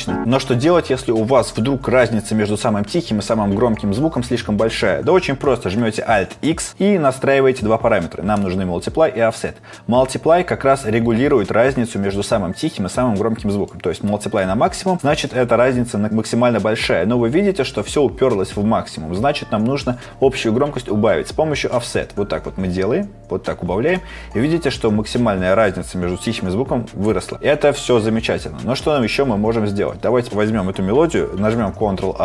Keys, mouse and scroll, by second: 6.4 alt+x, 31.9 ctrl+a.